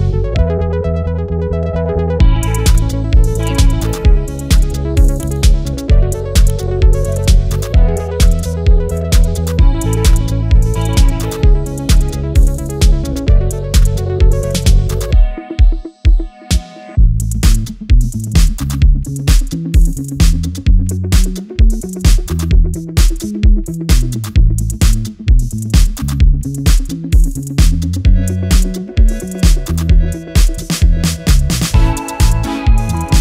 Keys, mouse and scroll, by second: 0.2 scroll down 1, 1.4-11.8 drag, 15.5 ctrl+z, 16.2 click, 17.5 alt+scroll down 1, 17.7-18.2 alt+scroll up 1, 19.4 click, 24.6 ctrl+z, 25.1 alt+scroll down 1, 25.3 alt+scroll up 1, 26.1 alt+scroll down 1, 26.3-26.6 alt+scroll up 1, 29.3 click, 29.6 scroll down 1, 29.8-31.3 scroll up 1.